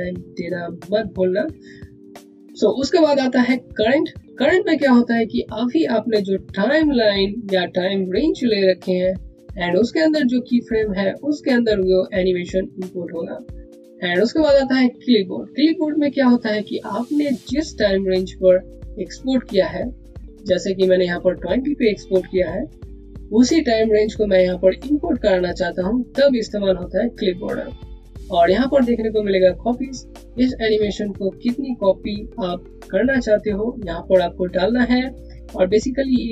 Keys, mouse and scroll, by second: 3.6 click, 6.7 click, 13.9 click, 34.4 click.